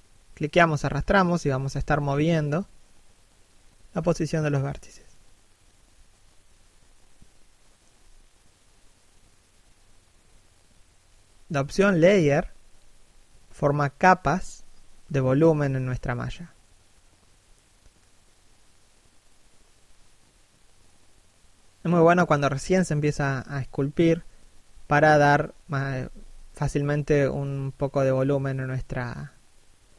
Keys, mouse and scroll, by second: 0.4 shift+middle click, 1.1 click, 3.2 1, 3.8 scroll down 1, 4.2 shift+middle click, 4.6 click, 10.1 scroll up 1, 10.4 click, 11.6 middle click, 11.9 scroll up 1, 12.2 middle click, 13.2 middle click, 14.3 click, 16.2 middle click, 16.7 click, 17.2 click, 18.7 shift+click, 22.2 1, 24.2 scroll down 1, 24.7 shift+middle click, 25.0 click.